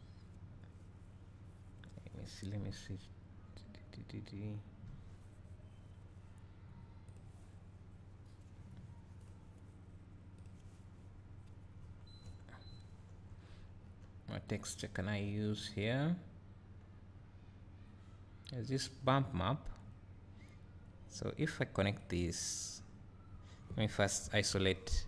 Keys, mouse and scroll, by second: 22.6-25.0 drag.